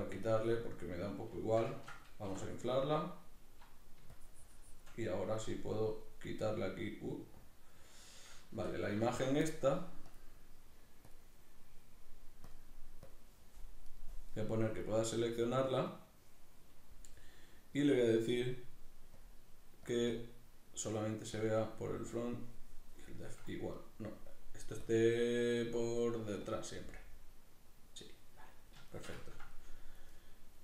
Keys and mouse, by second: 1.5-6.7 shift+middle drag, 3.3-5.4 drag, 8.5 Tab, 8.5-10.1 middle drag, 10.1-13.9 drag, 13.9 right click, 15.5-17.1 drag, 17.1-19.1 middle drag, 19.1-22.8 drag, 22.8-24.8 middle drag, 24.8-26.8 drag, 26.8-30.6 middle drag.